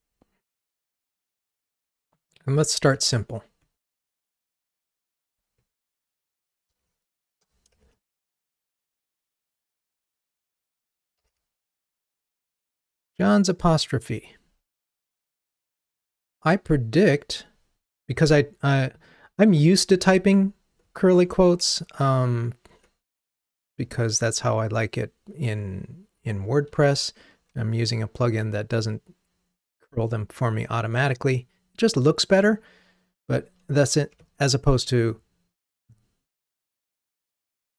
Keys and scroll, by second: 3.0 Delete.